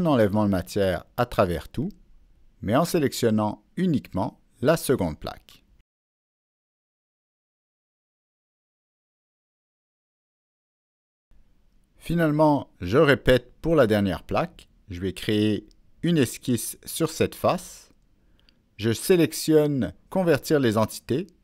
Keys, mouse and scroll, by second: 1.4 click, 2.1 middle click, 2.2 click, 3.5 click, 4.7 click, 4.7 middle click, 6.9-10.3 middle drag, 10.3-10.7 scroll up 1, 11.2 middle click, 12.8 click, 13.0 middle click, 13.6 click, 17.3 Escape, 17.3 click, 18.1 click, 20.0 Escape, 20.7 Escape, 20.7 click, 20.8 Escape.